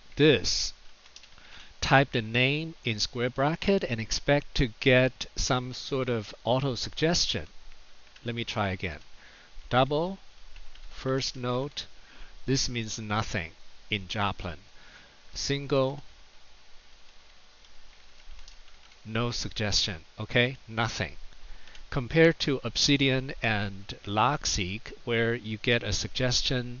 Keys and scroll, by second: 0.0-1.4 typing, 6.6 [, 7.9 BackSpace, 8.4 BackSpace, 9.5-11.5 typing, 15.1-18.7 typing, 21.5 Delete.